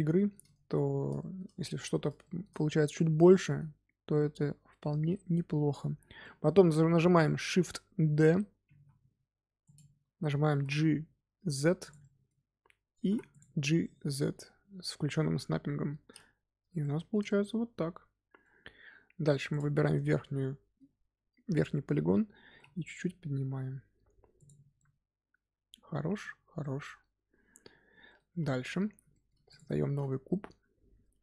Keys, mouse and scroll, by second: 0.1 shift+middle click, 0.8 scroll down 1, 1.1 shift+middle click, 1.8-2.1 scroll down 2, 2.1-5.3 shift+middle drag, 6.1-8.7 middle drag, 8.7 shift+d, 10.4 g, 11.9 middle click, 12.9 g, 13.7-19.1 middle drag, 19.1 3, 19.4 click, 20.0 middle click, 20.8-21.1 scroll up 2, 22.4 g, 24.7-26.3 middle drag, 26.3 scroll down 2, 26.5-28.6 middle drag, 28.6 Tab, 29.0-29.4 shift+middle drag, 29.4 click, 29.8 shift+a.